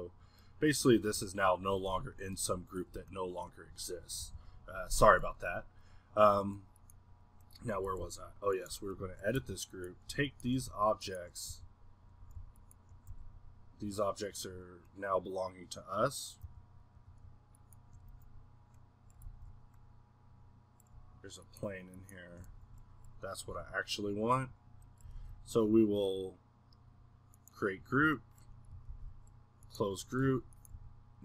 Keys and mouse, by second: 0.5-1.1 middle drag, 1.1 g, 2.1-4.2 middle drag, 4.2 n, 5.2-7.9 middle drag, 8.9-9.4 middle drag, 9.4 a, 10.4-11.5 middle drag, 11.5 g, 12.5-13.1 drag, 13.1 g, 14.2-16.5 middle drag, 16.5 g, 18.1 z, 20.2-22.5 middle drag, 22.5 z, 23.5 middle drag, 23.7 g, 24.5-25.2 middle drag, 26.2-28.9 middle drag, 29.9 middle drag, 30.2 a, 30.7 g.